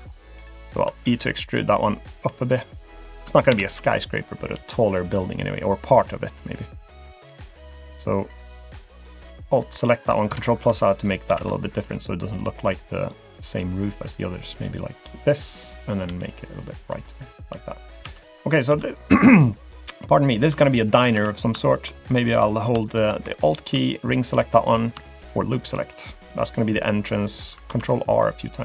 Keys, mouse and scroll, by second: 0.0-0.9 scroll down 4, 0.5 middle click, 0.9 e, 3.5 ctrl+KP_Add, 4.5 g, 7.0-7.4 scroll down 3, 7.4 click, 7.7 middle click, 9.0 alt+click, 10.3 ctrl+KP_Add, 11.3 s, 13.1 click, 16.1 g, 17.0 click, 17.4 middle click, 18.0 Tab, 18.3 click, 18.7 Tab, 18.8 click, 20.5 Tab, 20.8 click, 21.1 Tab, 21.3 click, 21.6 shift+middle click, 21.9-22.4 scroll up 3, 22.4-22.7 scroll down 1, 22.8 shift+middle click, 23.4 alt+click, 25.1 shift+click, 25.6 alt+click, 27.7 ctrl+r.